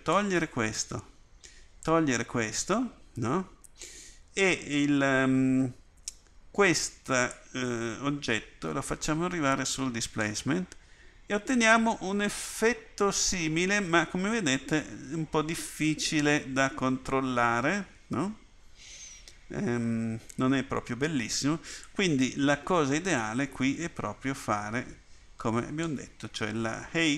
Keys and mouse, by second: 21.8-25.8 drag.